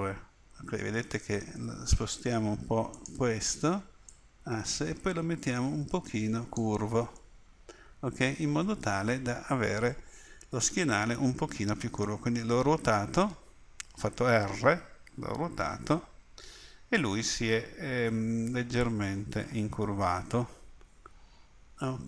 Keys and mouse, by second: 4.1-6.6 middle drag, 7.2-9.5 middle drag, 12.8-14.6 middle drag.